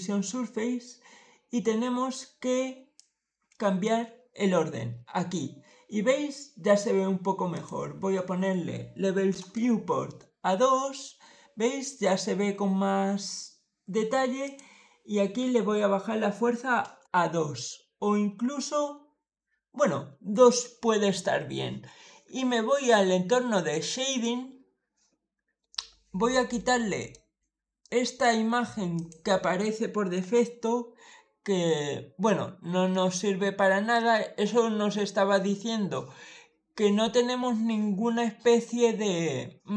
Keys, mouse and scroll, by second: 2.8-3.7 drag, 7.4 click, 7.8 2, 9.2 Return, 14.3 click, 15.2 2, 16.7 Return, 23.9 click, 26.4 middle click, 27.7 middle click, 28.8 click, 31.4-31.8 scroll up 2, 31.8-32.2 scroll down 1, 32.2 scroll up 1, 32.3-32.7 scroll down 3, 32.8-33.8 shift+middle drag.